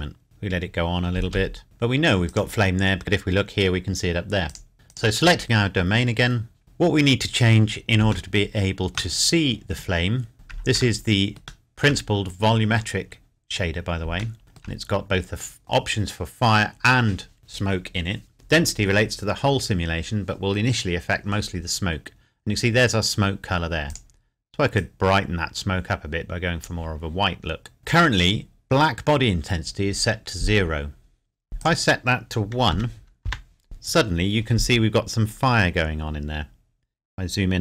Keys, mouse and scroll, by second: 0.2 space, 1.2 space, 1.6 shift+middle click, 2.3 click, 4.5 click, 6.6-7.0 scroll up 1, 8.0-8.3 scroll up 1, 8.3 shift+middle click, 10.8 shift+Num_Lock, 10.8 shift+middle click, 11.0 shift+middle click, 14.4 shift+Num_Lock, 14.4 shift+middle click, 23.9 click, 31.6 click, 32.7 KP_1, 34.8 KP_Enter, 36.3 scroll up 1.